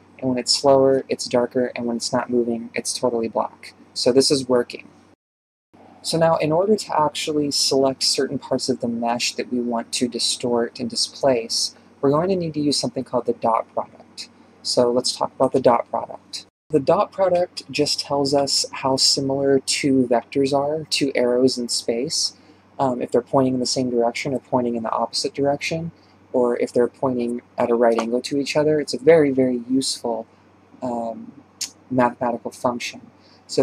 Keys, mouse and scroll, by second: 2.0-2.5 scroll down 2, 2.5 ctrl+space, 6.7 ctrl+space, 7.5 shift+space, 11.3-11.7 scroll up 7, 11.5-33.6 shift+middle drag.